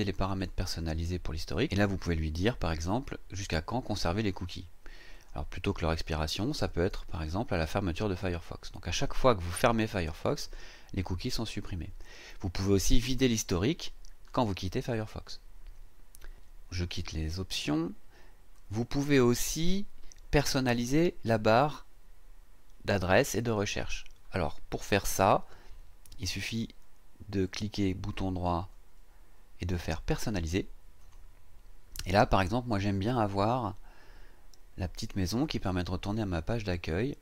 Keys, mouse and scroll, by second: 0.3 click, 5.1 click, 10.4 click, 18.5 click, 28.6 click, 31.0 click, 33.4-37.2 drag.